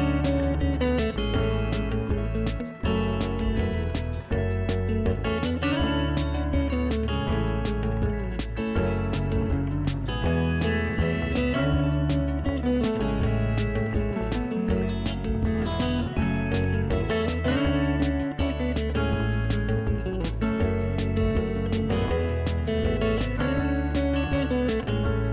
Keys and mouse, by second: 6.1 KP_1, 6.2 Return, 7.1 click, 7.4 KP_5, 7.5 Return, 8.8-10.4 typing, 8.8 click, 10.2 click, 11.2 click.